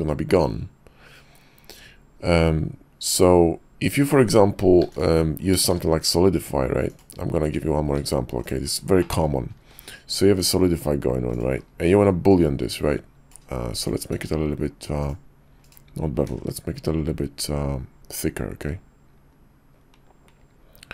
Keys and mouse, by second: 4.8 x, 5.6 shift+a, 7.9 s, 9.0 drag, 9.6 q, 12.3-13.9 drag, 14.1 q, 16.3 q.